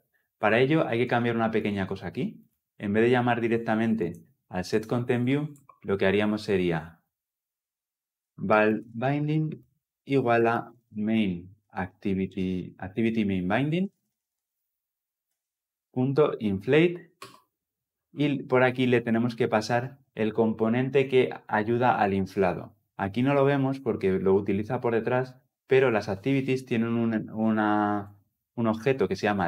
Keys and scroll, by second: 15.2 Return.